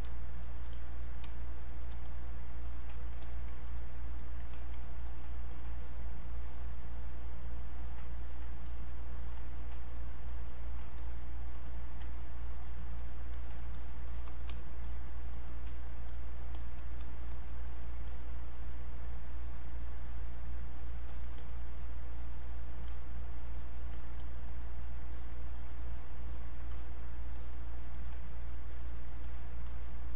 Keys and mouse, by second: 0.1 space, 0.4 click, 0.6 space, 0.7 click, 1.3 space, 1.6 click, 1.7 space, 2.1 click, 4.5 alt+click, 10.3 alt+click, 14.9 click, 16.6 alt+click, 17.2 alt+click, 20.0 alt+click, 20.7 click, 21.1 alt+click, 21.4 click, 23.5 click, 24.2 click, 25.0 click, 26.7 click.